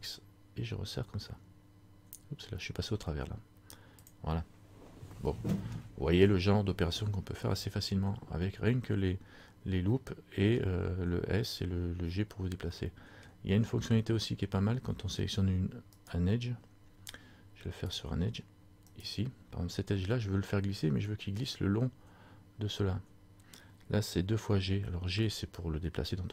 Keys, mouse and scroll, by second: 5.3 middle click, 10.1 middle click, 13.0 middle click, 13.7 scroll up 1, 16.2 right click, 16.2 scroll up 1, 18.0 click, 19.1 right click.